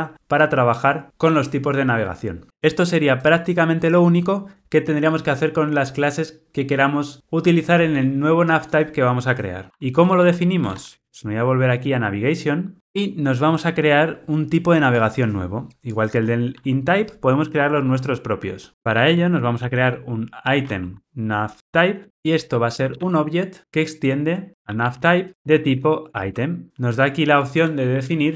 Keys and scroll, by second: 23.6 Return.